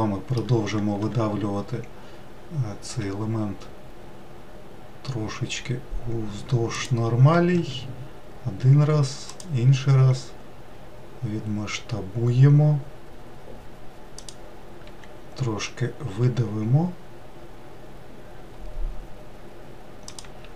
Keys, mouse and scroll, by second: 1.2 e, 7.8 e, 9.8 s, 15.1 e.